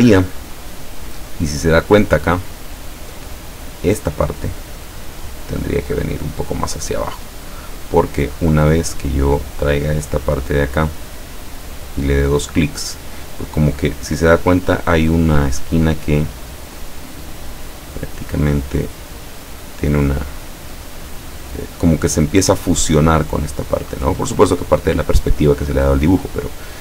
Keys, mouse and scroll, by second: 1.8 click, 2.5 click, 3.4 click, 5.5-7.4 drag, 7.7 click, 8.8 click, 9.5-11.8 drag, 16.8-19.3 drag, 20.1-21.4 drag.